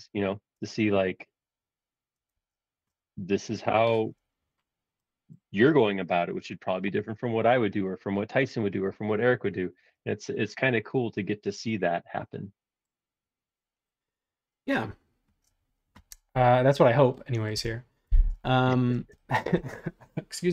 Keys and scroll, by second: 0.0-0.5 typing, 2.3 super+z.